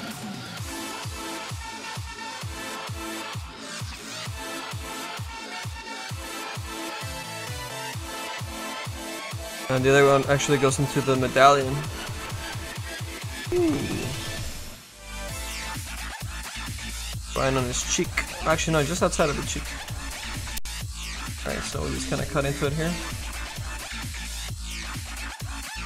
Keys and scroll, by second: 19.9 s, 21.3 s, 22.0 s.